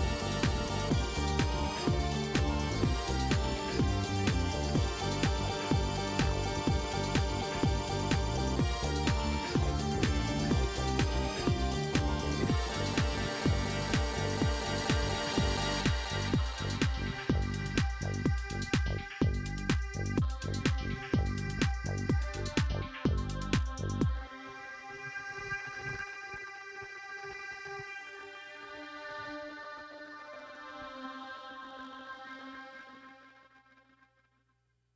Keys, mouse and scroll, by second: 0.3 shift+right click, 4.6 click, 6.1 shift+right click, 7.6 click, 10.2 shift+right click, 11.9 shift+right click, 13.6 click, 15.1 click, 16.4 shift+right click, 19.0 scroll up 2, 20.0 middle click, 23.2 click, 24.4 click, 25.1 right click, 26.3 click, 28.6 click, 29.2 click, 29.8 right click, 30.8 click, 33.1 click.